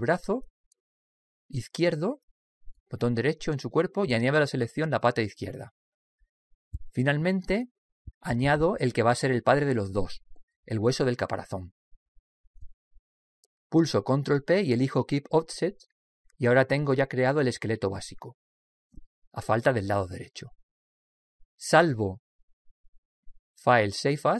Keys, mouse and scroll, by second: 1.1 right click, 6.8 right click, 11.9 right click, 14.8 ctrl+p, 19.7-22.0 middle drag, 23.3 click.